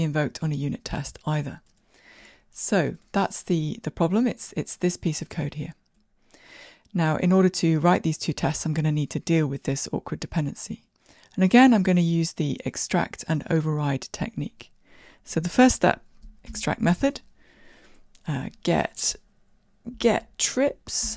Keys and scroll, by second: 2.6 shift+Escape, 17.2 alt+super+m.